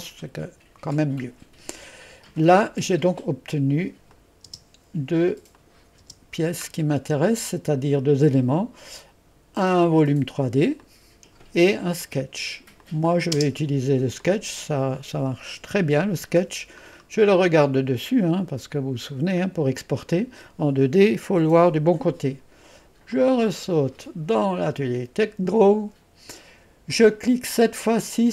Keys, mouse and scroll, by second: 4.1 click, 4.7 click, 5.6 click, 6.1 typing, 6.7-7.7 scroll down 1, 8.0-9.2 drag, 10.1 click, 10.9 click, 12.1 click, 12.9 click, 13.4 space, 13.7-15.2 drag, 17.0-19.2 scroll down 1, 19.8-20.8 scroll up 1, 20.8-22.7 scroll up 1, 23.2 click, 25.3 click.